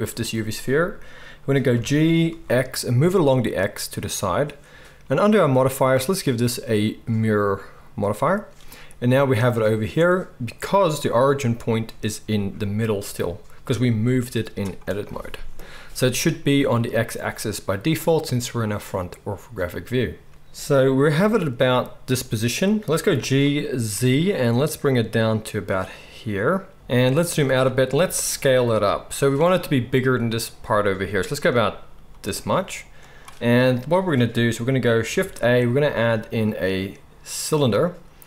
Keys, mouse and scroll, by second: 1.7 g, 4.1-5.8 right drag, 10.5 drag, 10.5 middle drag, 10.5 right drag, 11.8-12.4 scroll, 12.4-14.0 scroll up 1, 14.0-20.3 drag, 14.0 middle click, 14.0 right click, 14.0 g, 20.3 ctrl+z, 20.3-30.6 middle drag, 21.2 g, 23.0 g, 26.7 shift+a, 27.9 s, 32.1 s, 35.1 shift+a.